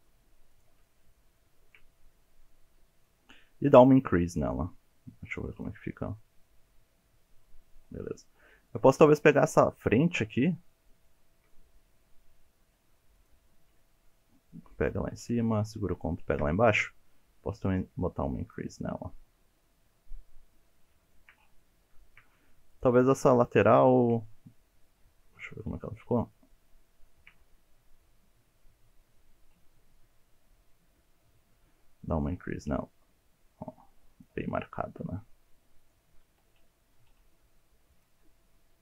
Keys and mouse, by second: 0.5 shift+click, 0.8-1.4 middle drag, 1.7-3.0 middle drag, 3.7 click, 5.6 click, 6.0-7.9 middle drag, 9.7 shift+middle click, 10.1 shift+middle click, 10.5 shift+middle click, 10.9 shift+middle click, 11.5 middle click, 13.9 shift+middle click, 14.4 shift+middle click, 14.7 shift+middle click, 15.9 ctrl+click, 17.7 click, 18.9-20.9 middle drag, 21.2 shift+middle click, 22.0 shift+middle click, 22.7 alt+click, 23.9 shift+middle click, 24.2 middle click, 25.4 shift+middle click, 25.8 shift+middle click, 26.1 shift+middle click, 26.5 shift+middle click, 26.8 shift+middle click, 30.1-31.2 middle drag, 30.6 click, 32.6-34.3 drag, 34.5-35.9 middle drag, 36.5 alt+z, 36.8 alt+z, 37.1 click, 37.6 shift+middle click, 38.7 click.